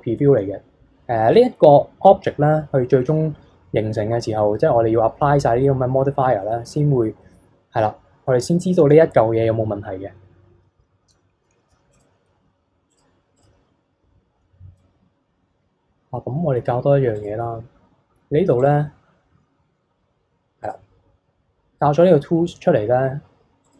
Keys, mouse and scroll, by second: 4.2-5.0 scroll down 1, 11.4 alt+h, 11.9 click, 12.3-12.9 scroll up 1, 12.9 click, 13.3 click, 17.1-20.3 drag, 23.6 click.